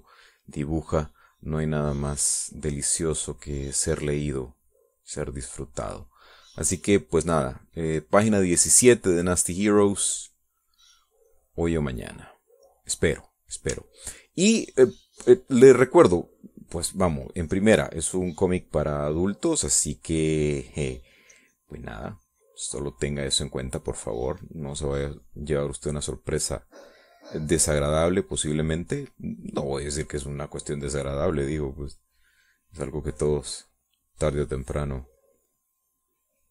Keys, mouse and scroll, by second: 8.6 middle click, 9.4-13.3 drag, 13.5 click, 15.7 ctrl+click, 18.3-27.4 drag, 27.5-34.0 drag, 34.1-36.5 drag.